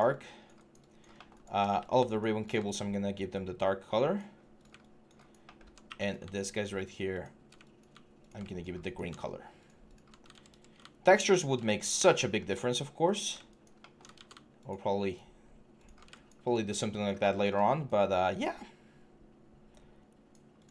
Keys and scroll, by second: 10.1 ctrl+z, 13.9 ctrl+z.